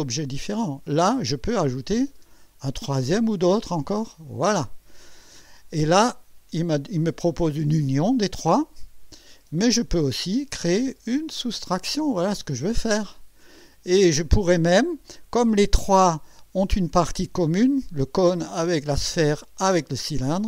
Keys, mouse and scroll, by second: 2.1 click, 4.1 click, 5.8-9.3 drag, 10.3 click, 11.1 click, 12.1-14.2 drag, 14.3-15.2 drag.